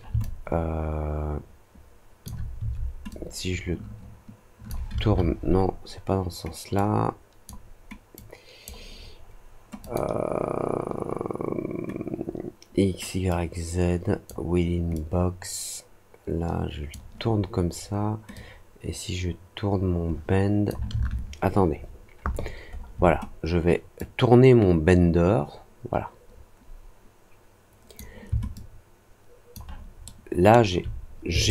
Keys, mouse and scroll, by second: 0.1-2.2 alt+drag, 3.0-4.6 drag, 6.7-7.4 drag, 8.1 click, 9.7 click, 13.2 click, 14.9 click, 18.3-20.6 drag, 23.9-27.9 drag, 28.5-29.5 alt+drag, 30.0-30.4 alt+middle drag, 31.4 alt+middle click.